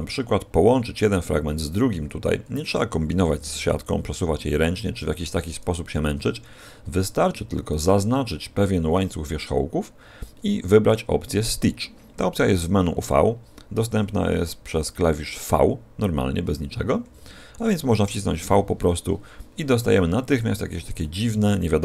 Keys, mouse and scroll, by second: 3.2 l, 4.1 r, 6.1 a, 7.7 alt+shift+right click, 13.0 click, 18.4 v, 21.0 middle click.